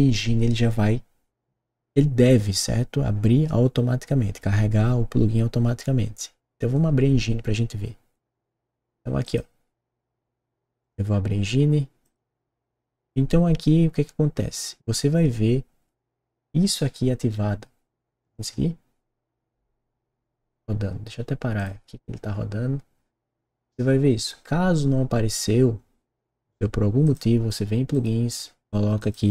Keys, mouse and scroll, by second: 9.2 click, 10.7 click, 12.0 click, 18.1 click, 21.5 click, 27.0 click, 27.9 click, 28.9 click.